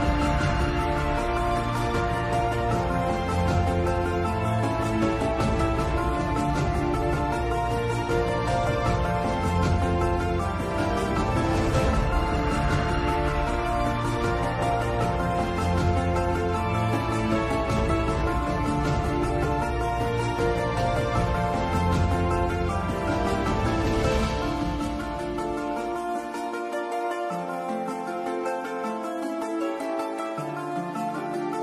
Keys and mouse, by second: 5.7-7.5 drag, 8.3-11.2 drag, 14.2 Tab, 15.6-17.8 drag, 21.2 click, 23.8 click, 27.0 click, 28.0-29.4 middle drag, 30.3 KP_7.